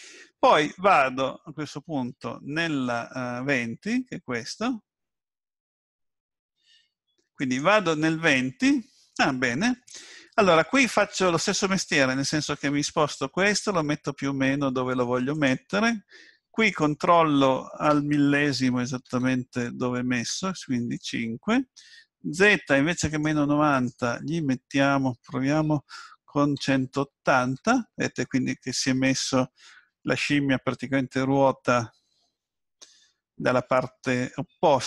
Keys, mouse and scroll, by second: 7.4 click, 12.5 g, 16.7 click, 23.7 click.